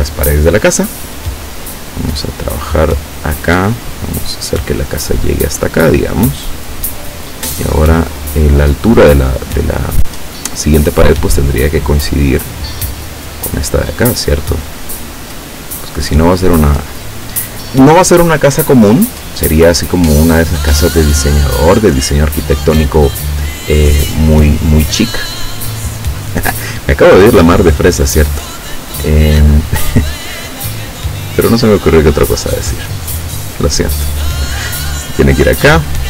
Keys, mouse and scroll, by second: 3.2 click, 6.2 click, 11.8 click, 14.8 click, 16.5 click, 25.5-26.0 scroll up 4, 28.9 click.